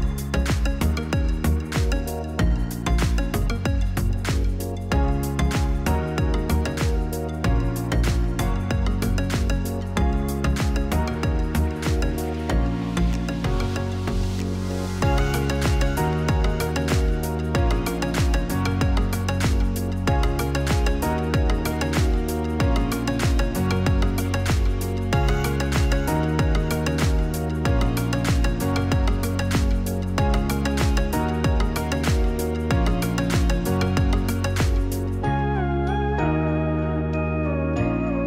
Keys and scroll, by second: 4.4-6.5 typing, 15.9 u, 20.8-21.8 typing, 30.0-30.9 typing, 32.4 ctrl+c, 32.8 ctrl+v, 34.8 ctrl+c, 35.9 ctrl+v, 37.3 ctrl+v, 37.6 ctrl+c, 37.7 ctrl+v.